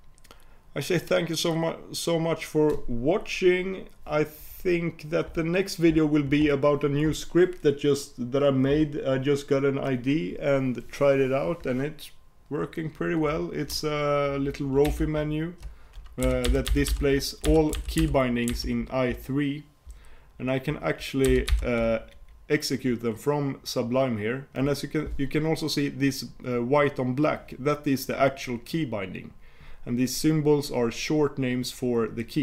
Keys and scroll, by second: 14.9 super+y.